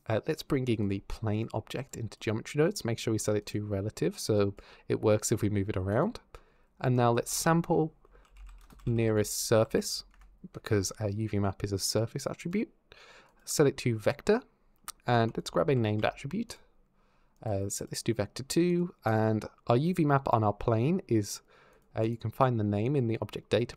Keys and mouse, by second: 0.6 click, 3.2 click, 5.7 click, 12.2 click, 13.1 click, 15.0 shift+a, 17.6 click, 18.9 click, 21.5 click, 21.8 click, 22.7 click, 23.6 click.